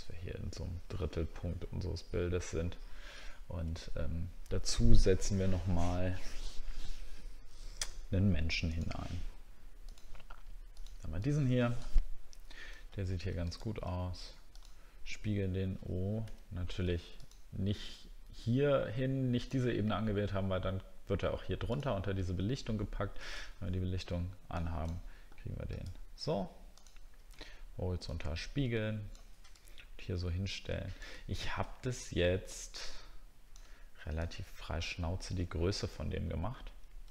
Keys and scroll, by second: 3.3 alt+scroll up 1, 13.0 alt+scroll down 1, 23.4 alt+Tab, 36.0 alt+scroll up 1.